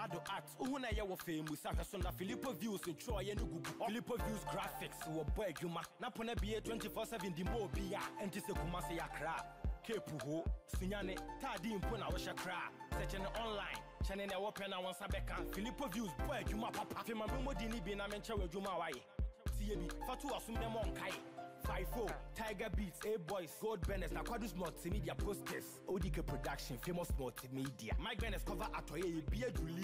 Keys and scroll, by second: 10.7 Right, 23.6 Return, 27.0 Return, 29.5 ctrl+t.